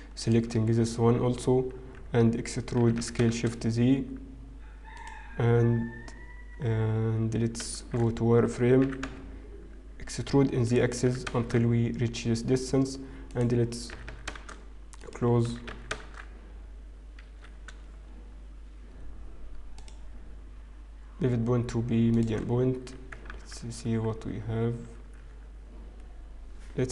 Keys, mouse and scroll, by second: 0.3 click, 1.0 Tab, 1.0-1.3 scroll up 1, 3.5 e, 8.7 shift+z, 10.8 e, 11.1 s, 17.3 click, 17.3 e, 19.7 click, 24.7 ctrl+z, 25.0 ctrl+z, 25.9-26.9 scroll down 2.